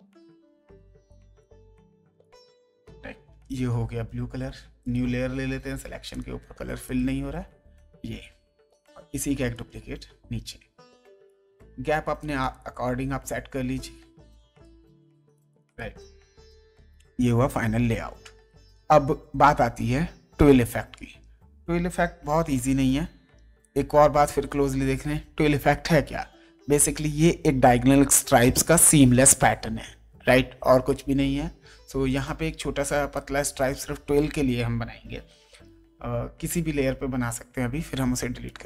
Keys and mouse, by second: 1.4 click, 3.3 g, 4.8 click, 6.1 click, 11.2 shift+click, 12.4 shift+click, 15.0 click, 22.3 ctrl+d, 23.6 click, 32.1 click, 32.8 space, 33.1 click, 35.4 m, 38.4 click.